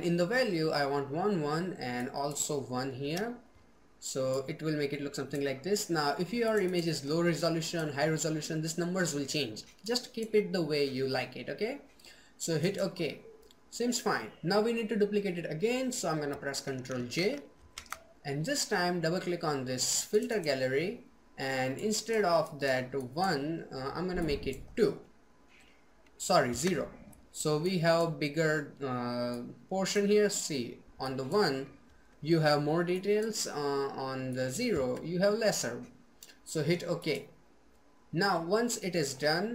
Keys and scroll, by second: 16.3 ctrl+j.